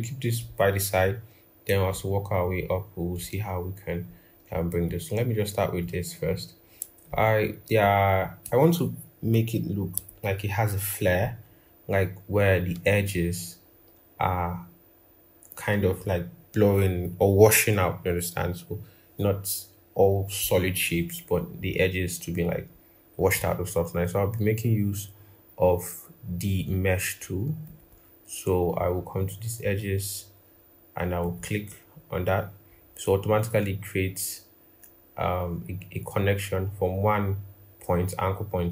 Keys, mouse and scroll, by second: 10.1 ctrl+=, 10.2 ctrl+=.